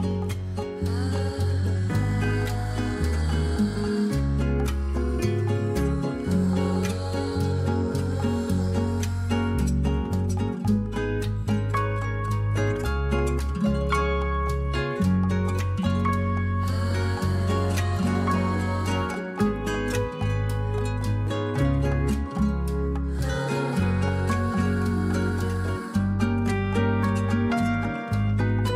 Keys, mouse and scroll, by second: 3.2-5.4 drag, 6.3-9.9 drag, 10.2 click, 10.3 middle click, 11.7-16.3 drag, 16.3 middle click, 16.6-19.9 drag, 20.0-20.9 drag, 20.9-22.9 middle drag, 23.0-26.7 drag, 27.4-28.7 drag.